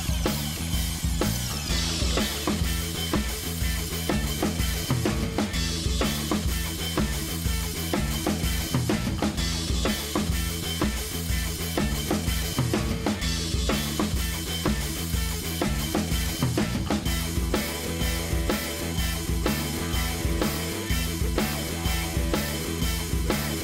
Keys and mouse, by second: 0.2 right click, 0.4 click, 0.9-2.1 ctrl+middle drag, 2.1 right drag, 2.7 click, 3.1 ctrl+shift+middle click, 3.9 click, 4.5 click, 5.7 click, 6.4 click, 6.9 middle click, 7.4 click, 7.7 middle drag, 8.0 click, 9.0-10.1 drag, 10.1 BackSpace, 11.1 right click, 11.5-14.4 drag, 14.4-14.9 ctrl+middle drag, 14.9 right click, 15.3-15.7 ctrl+middle drag, 15.7-16.7 drag, 17.0-18.9 ctrl+shift+middle drag, 18.9 KP_1, 19.9-21.1 drag, 21.2 click, 22.2-22.8 ctrl+shift+middle drag.